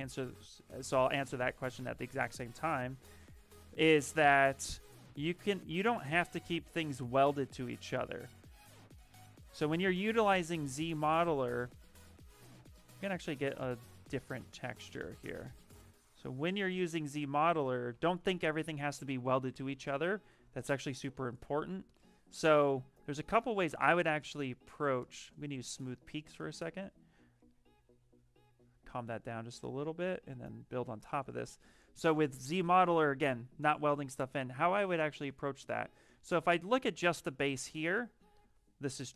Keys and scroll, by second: 16.8 ctrl+z, 17.1 ctrl+z, 17.5 ctrl+z, 17.8 ctrl+z, 18.1 ctrl+z, 25.4 s, 37.6 w.